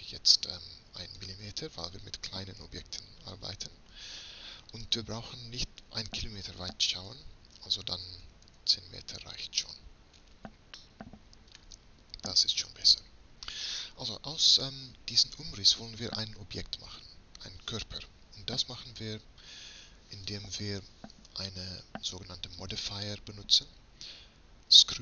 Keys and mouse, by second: 1.4 m, 4.9-6.7 drag, 6.7-10.9 middle drag, 15.7-17.3 right drag, 17.3-19.0 middle drag, 20.3-22.2 middle drag, 22.7-25.0 middle drag.